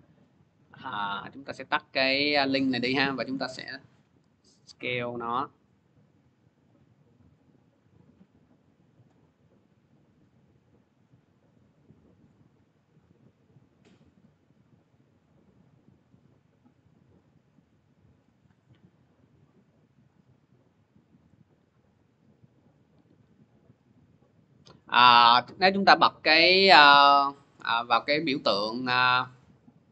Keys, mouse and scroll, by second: 1.0-6.0 drag, 7.5 click, 8.2 middle click, 18.0 click, 19.9 click, 20.6 middle click, 23.2 click, 25.3 click.